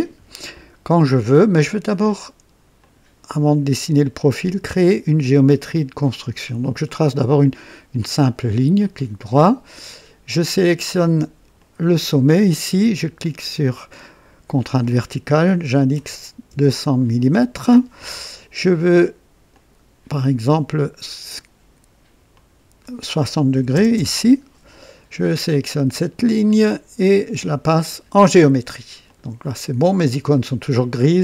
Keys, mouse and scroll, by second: 2.8 click, 6.1 click, 6.9 right click, 8.2 click, 8.8 right click, 11.6 click, 14.0 click, 15.7 KP_2, 15.9 KP_0, 16.5 KP_0, 17.2 KP_Enter, 18.3 typing, 19.5 click, 20.8 click, 22.3 click, 23.6-23.9 typing, 23.9 KP_Enter, 26.5 click, 27.7 click, 29.1 click.